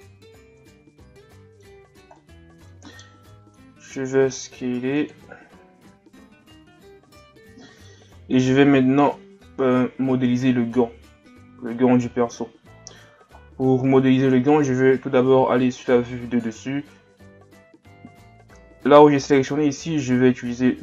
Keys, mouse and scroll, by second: 0.6 alt+shift+right click, 1.0-3.3 middle drag, 3.3 s, 5.3-6.6 scroll down 1, 11.5-12.7 scroll down 4, 12.7-14.5 scroll up 11, 14.5 KP_7, 15.5-18.5 scroll down 1, 18.5 scroll down 1, 18.5 w.